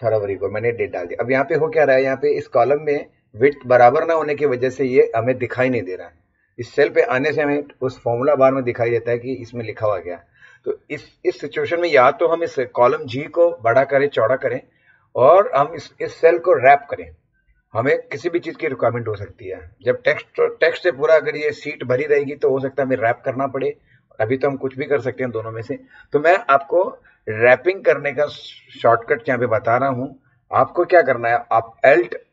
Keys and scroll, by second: 1.0 Left.